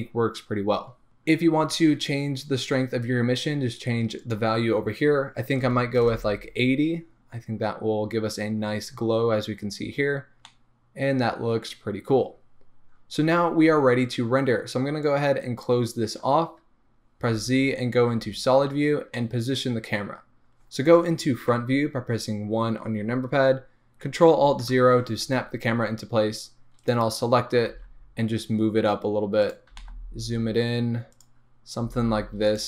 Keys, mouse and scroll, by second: 6.1-13.1 drag, 6.3 Return, 13.1-15.2 middle drag, 15.2-19.2 drag, 17.4 z, 18.7 scroll down 1, 19.2-20.1 middle drag, 20.2-24.8 middle drag, 21.5 KP_1, 24.7 ctrl+alt+KP_0, 27.0 click, 27.7 g, 31.5 scroll up 1, 31.9 g.